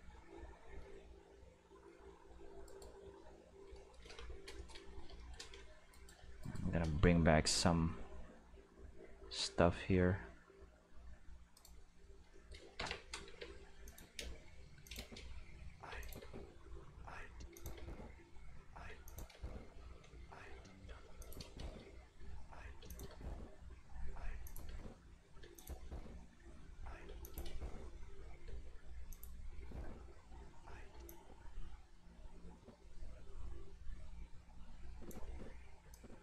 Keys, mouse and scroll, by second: 2.6 right click, 5.9 right click, 6.4 shift+right click, 6.9 g, 8.2 middle click, 9.1-10.7 middle drag, 11.5 click, 12.4 shift+middle click, 13.2-16.2 typing, 13.8 click, 14.8 click, 16.0 click, 17.3 space, 17.5 click, 17.7 space, 18.8 space, 19.0 click, 19.3 space, 20.8 space, 21.2 click, 21.4 space, 22.8 space, 22.8 click, 23.0 space, 24.3 space, 24.4 click, 24.6 space, 25.4 space, 25.5 click, 25.7 space, 27.0 space, 27.2 click, 27.4 space, 28.4 space, 29.1 click, 29.3 space, 30.9 space, 31.0-35.0 drag, 35.2 space, 35.8 space, 35.9-36.2 drag.